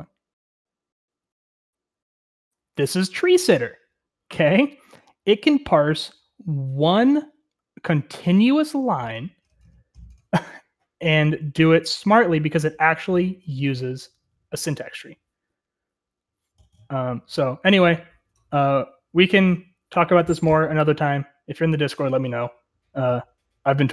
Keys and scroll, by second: 0.6 Right, 1.4 Right.